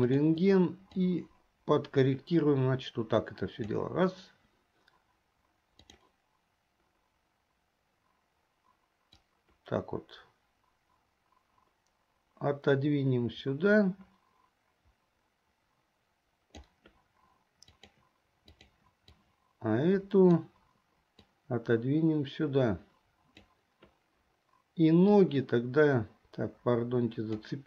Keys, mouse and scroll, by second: 0.4 click, 1.1-3.8 drag, 5.9 click, 9.4-16.7 drag, 17.7 click, 18.5 click, 19.2-20.5 drag, 21.5-23.5 drag, 25.4-27.6 drag.